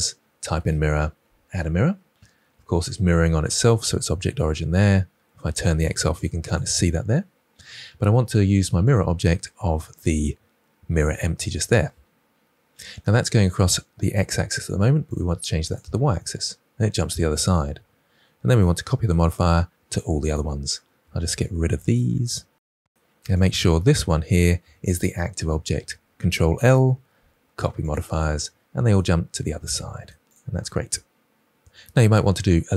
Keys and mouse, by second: 5.5 click, 5.8 click, 6.1 click, 8.8 click, 11.0 click, 15.0 click, 15.6 click, 20.2 ctrl+click, 26.5 ctrl+l.